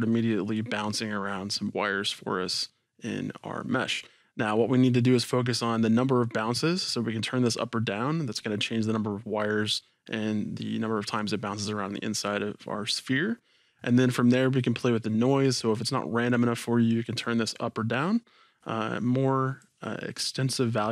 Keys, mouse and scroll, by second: 0.0-2.0 drag, 17.2-20.9 drag.